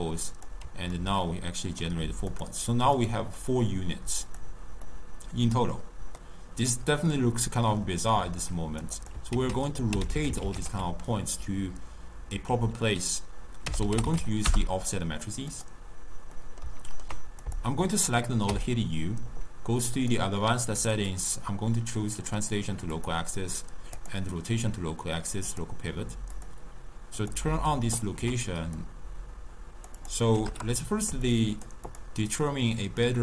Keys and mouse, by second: 0.1 click, 1.0-2.4 ctrl+middle drag, 2.4 click, 3.1 click, 3.5 click, 4.4 click, 4.9-8.6 middle drag, 8.6-9.2 drag, 9.4 ctrl+a, 10.3 f, 16.5-17.5 middle drag, 17.5 click, 18.6 u, 27.0 click, 28.9-32.1 drag, 32.9-33.2 drag.